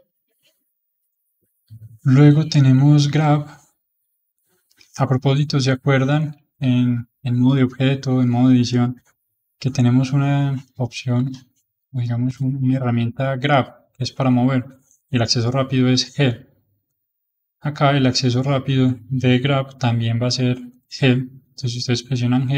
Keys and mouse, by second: 2.7-3.9 drag, 3.9-6.9 middle drag, 9.0-16.4 middle drag, 16.4-18.0 middle drag, 18.0-20.0 drag, 20.0 g, 22.1-22.5 middle drag.